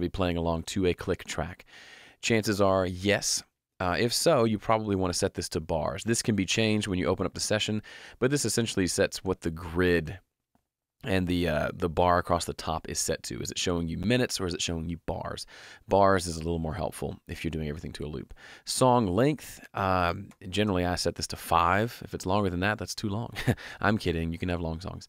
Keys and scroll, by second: 20.3 5, 20.5 Home.